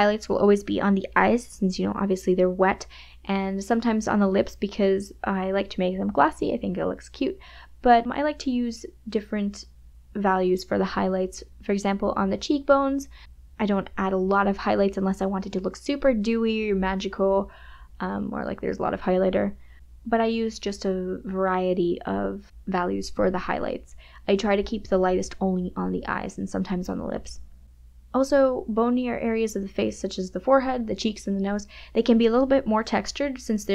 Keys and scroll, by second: 8.3 KP_Subtract, 12.4 space, 17.0 KP_Subtract, 17.8 m, 17.9 KP_Add, 24.6 space, 29.3 space.